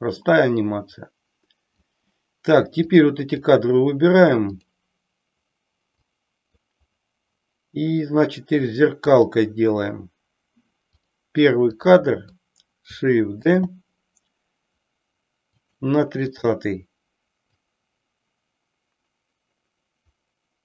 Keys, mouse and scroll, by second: 2.8-3.3 drag, 4.6 click, 6.1 click, 9.0 click, 11.7 click, 13.4 shift+d, 16.4 click, 17.4-20.6 drag.